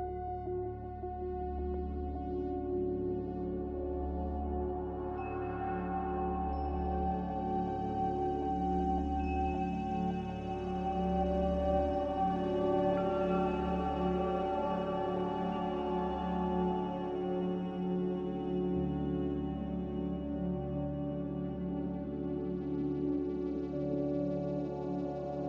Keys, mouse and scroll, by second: 2.3 ctrl+b, 7.5 z, 8.7 Delete, 15.8 ctrl+q, 16.4 ctrl+w, 24.7 b.